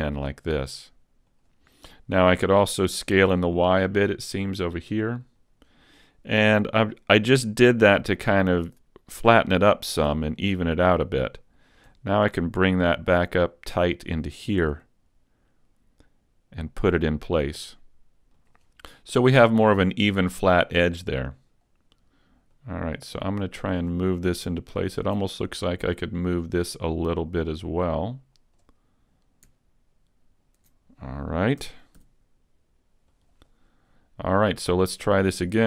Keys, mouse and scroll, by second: 1.4 click, 3.0 s, 5.4 click, 10.1 r, 11.6 click, 11.9 g, 14.2 click, 14.6 s, 18.6 click, 22.6 click, 24.8 alt+right click, 26.8 click, 30.4 alt+right click, 31.6 s, 33.2 click.